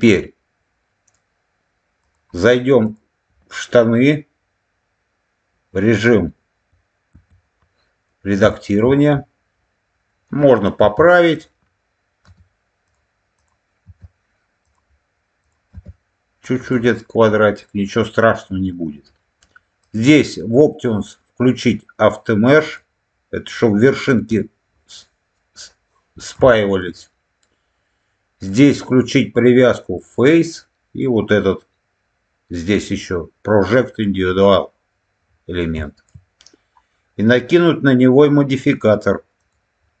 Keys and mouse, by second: 2.0 click, 2.8 click, 7.0 Tab, 8.4 shift+middle click, 10.7 1, 12.2 g, 12.7 click, 13.7 g, 14.5 click, 15.4-16.6 drag, 19.8-23.9 drag, 26.4 shift+middle click, 28.5-34.6 drag, 35.7 shift+middle click, 38.5 click, 39.3-40.0 drag.